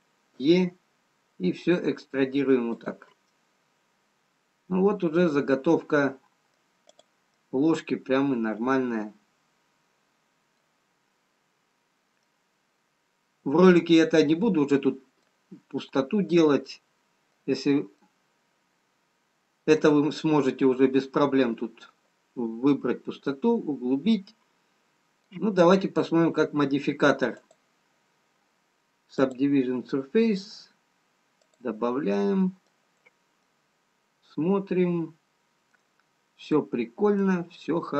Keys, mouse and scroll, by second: 1.0 e, 3.9 middle click, 7.9 click, 7.9 middle click, 12.5-12.9 scroll up 1, 13.7 middle click, 17.5 middle click, 17.5-19.0 scroll down 1, 19.0 middle click, 19.0-20.0 scroll down 2, 24.5 middle click, 27.9 click, 32.0 click, 32.8 middle click, 34.3 middle click.